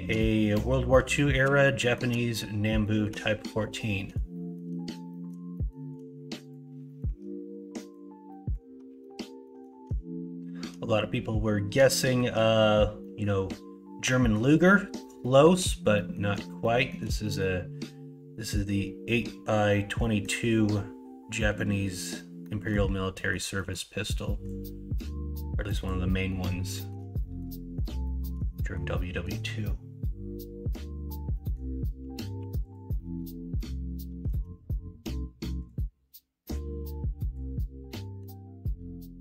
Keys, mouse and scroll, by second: 1.1 shift+middle drag, 1.8 middle click, 2.8 shift+middle drag, 4.3 shift+middle drag, 5.0 middle drag, 5.5 shift+middle drag, 6.8 middle drag, 7.0 Tab, 8.2 middle click, 9.0 shift+middle click, 11.9 shift+middle click, 13.0 middle click, 14.0 middle click, 15.2 shift+middle click, 15.9 middle click, 16.6 shift+middle click, 17.2 middle click, 20.0 middle click, 22.4 middle click, 23.1 middle click, 23.5 middle click, 26.2 scroll up 1, 26.4 scroll down 1, 26.7 scroll up 1, 26.8 middle click, 26.9 scroll down 1, 27.2 shift+middle click, 27.5 middle click, 28.0 shift+middle click, 28.5 middle click, 29.0 scroll up 2, 29.2 scroll down 2, 31.3 middle click, 32.3 4, 32.9 middle click, 34.2 alt+z, 37.2 click, 37.8-39.2 middle drag, 37.8 scroll up 1.